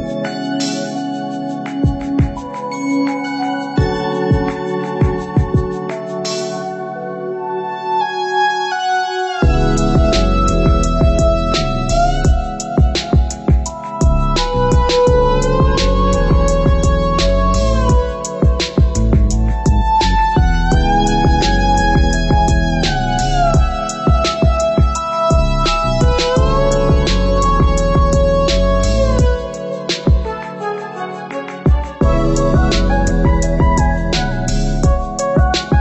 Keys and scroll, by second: 35.4 ctrl+c, 35.6 ctrl+v.